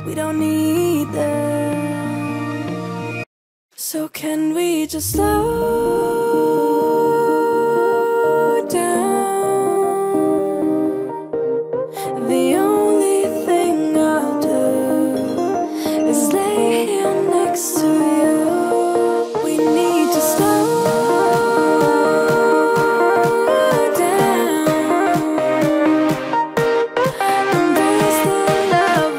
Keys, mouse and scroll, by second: 1.1 t, 1.9 click, 5.9-7.1 typing, 8.1 ctrl+a, 8.9 click, 14.1 ctrl+z, 15.7-21.4 drag, 21.4-23.5 alt+drag, 23.5 Up, 25.5 click.